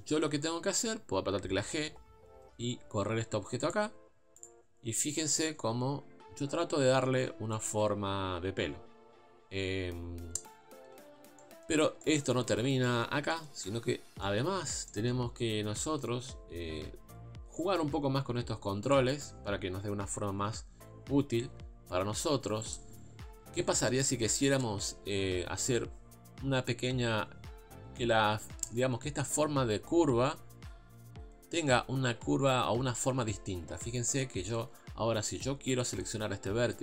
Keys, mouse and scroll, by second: 1.7 g, 4.4 click, 5.4 g, 9.9 scroll up 2, 10.7 scroll down 2, 11.4-13.7 shift+middle drag, 13.7 a, 13.9-14.2 scroll up 2, 14.2 shift+middle click, 14.6 scroll up 1, 14.9-18.9 shift+middle drag, 18.9 click, 20.3 g, 23.1-23.7 scroll down 1, 23.7 shift+middle click, 24.1 scroll up 2, 35.9 click.